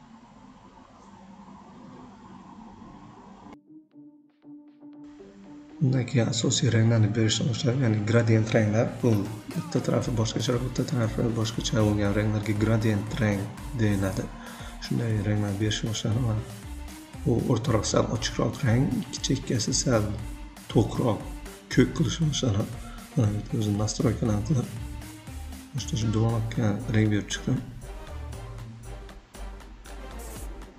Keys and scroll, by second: 25.7 ctrl+a, 25.9 3, 26.0 Return, 29.0-29.9 typing.